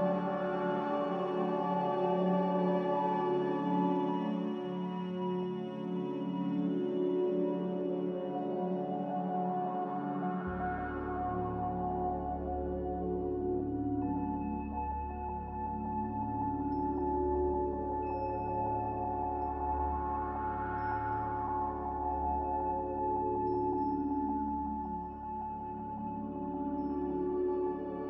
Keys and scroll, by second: 1.7 m, 10.0 z, 13.8 m, 15.2 Escape, 19.4-20.1 typing, 24.0 ctrl+b.